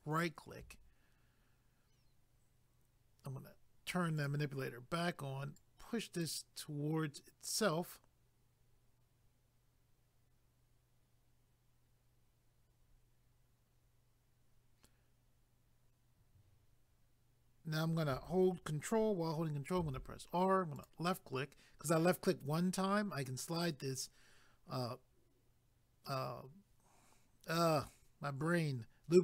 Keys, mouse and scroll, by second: 4.2 click, 5.6 click, 19.8 ctrl+r, 20.8 click.